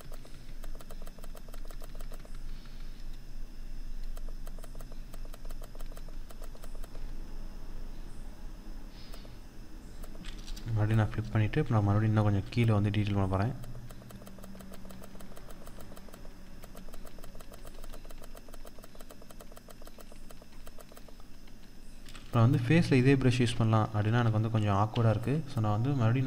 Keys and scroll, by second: 23.4 ctrl+z.